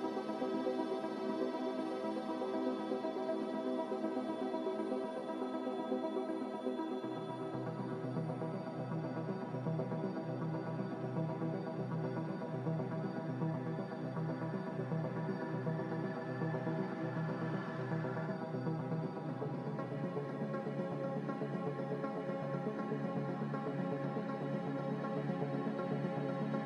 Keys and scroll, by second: 16.6 g, 21.1 h.